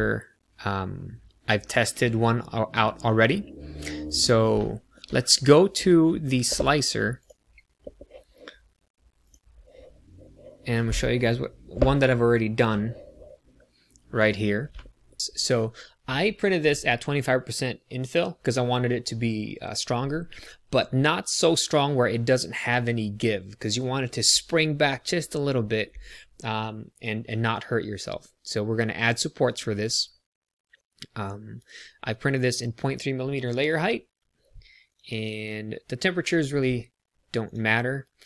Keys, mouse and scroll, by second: 4.5 shift+middle click, 5.3 middle click.